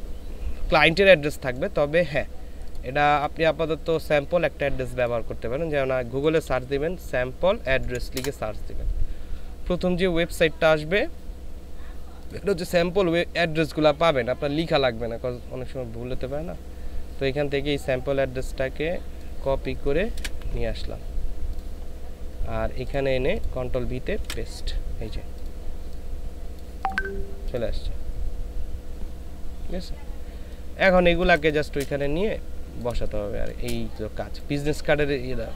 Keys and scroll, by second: 6.5 a, 7.8 Down, 8.1 Return, 20.2 ctrl+c, 24.2 ctrl+v, 31.2 ctrl+space, 32.9 space.